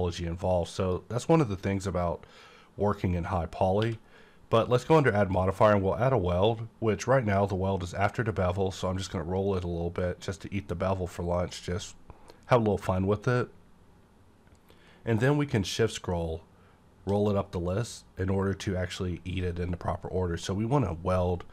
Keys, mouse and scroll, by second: 0.8 click, 3.8 q, 5.2 click, 7.1 scroll up 1, 13.3 scroll up 1, 15.5-16.2 shift+scroll up 2, 16.2-17.2 shift+scroll up 1, 17.2-18.0 scroll up 1.